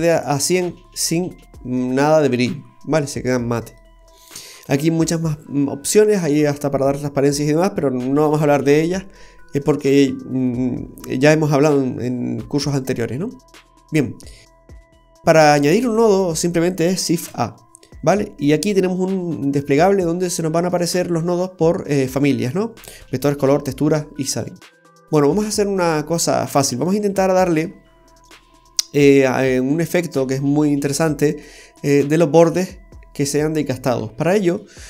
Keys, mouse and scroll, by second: 0.7 middle click, 4.3-5.4 scroll down 1, 5.6 scroll down 1, 5.9 middle click, 12.8-13.1 scroll down 2, 14.7 middle click, 14.7-15.0 scroll down 2, 15.5 scroll up 1, 15.7-16.7 scroll down 3, 16.7 scroll down 1, 17.2 shift+a, 25.8-26.2 scroll up 2, 26.2 middle click, 29.2 scroll up 1, 29.9 middle click, 29.9-30.5 scroll up 4, 30.8 middle click, 34.2-34.6 scroll down 3, 34.6 middle click.